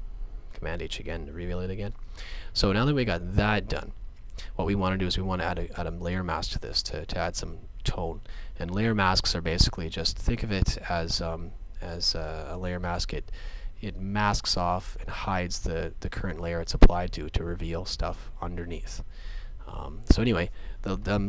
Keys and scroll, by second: 0.5 super+h.